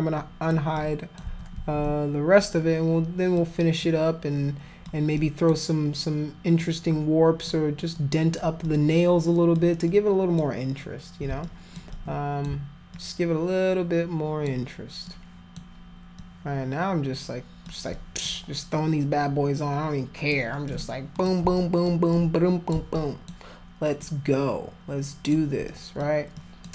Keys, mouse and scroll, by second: 0.8 alt+click, 1.6 ctrl+z, 2.4 alt+click, 3.8-4.8 alt+drag, 5.2 alt+click, 6.6 alt+click, 7.9 alt+click, 8.6 alt+click, 9.9 alt+click, 11.4 alt+click, 11.9 alt+click, 12.9-14.5 alt+drag, 15.1 alt+click, 16.2-17.6 alt+drag, 17.9 alt+click, 18.7-20.3 alt+drag, 20.6 alt+click, 21.5 alt+click, 22.1 alt+click, 22.9 alt+click, 24.0-25.3 alt+drag, 25.7 alt+click, 26.4 alt+click.